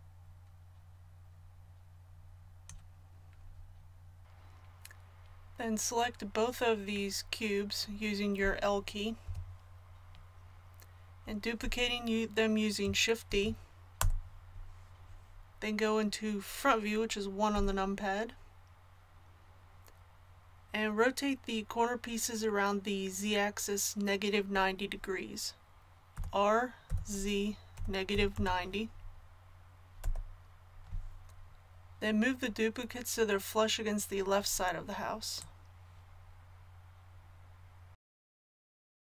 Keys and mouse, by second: 9.2 l, 13.3 shift+d, 17.5 KP_1, 26.1 r, 35.4-37.4 drag.